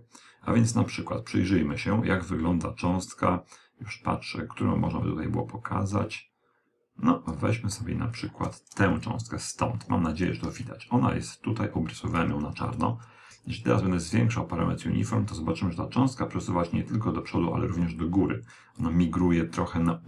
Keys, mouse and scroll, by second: 8.4-10.2 d, 8.5 click, 11.9 click.